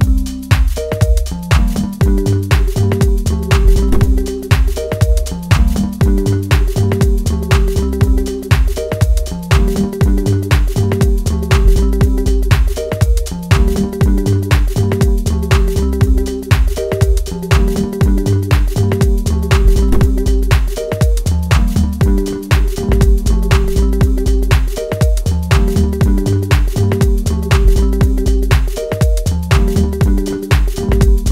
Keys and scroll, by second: 16.3 ctrl+space, 17.5 Left.